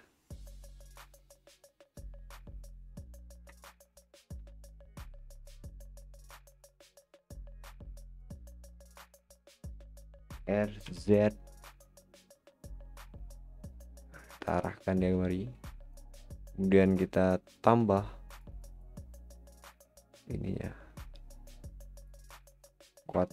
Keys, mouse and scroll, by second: 3.3-3.6 scroll down 4, 3.6 middle click, 4.3 s, 8.9 click, 10.3 r, 14.3-16.2 middle drag, 16.2-16.7 scroll up 3, 17.5-23.3 drag, 22.9 scroll up 3.